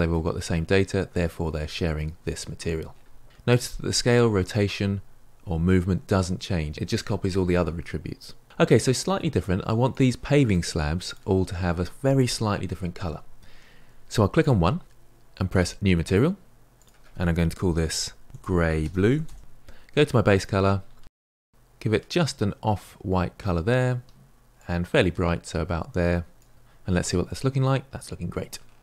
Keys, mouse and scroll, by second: 9.9 click, 10.4 click, 11.0 click, 14.4 click, 15.5-19.4 drag, 20.7 click, 27.2-28.8 middle drag.